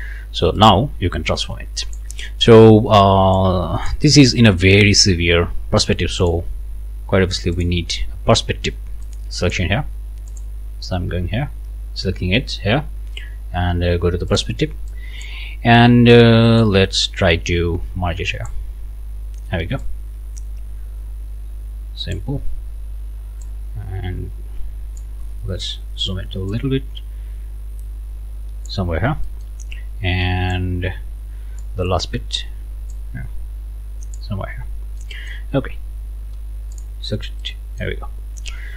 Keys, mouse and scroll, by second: 0.6-2.1 drag, 3.3 click, 5.8 click, 7.5-9.7 drag, 10.3 click, 14.3 click, 14.9 click, 16.6-18.7 drag, 19.8-22.3 drag, 23.4-25.2 drag, 25.2-25.5 scroll up 2, 26.5-28.9 drag, 28.9 scroll down 1, 29.2 click, 30.5-31.8 drag, 31.8 scroll down 1, 31.9 scroll up 1, 32.9-34.3 drag, 34.4 scroll down 1, 35.0 click, 36.7 click, 37.4 click, 38.6-38.7 scroll down 1.